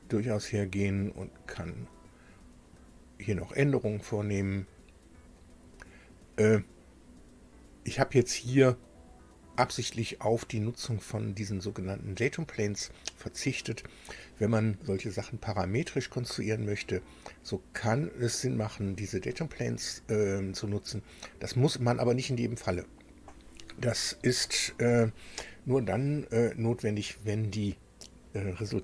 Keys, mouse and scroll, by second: 1.3 click, 5.2 click, 6.3-6.8 scroll up 2, 7.0-7.4 scroll down 2, 7.8-8.2 scroll up 2, 12.5-12.9 scroll down 2, 13.7 scroll up 2.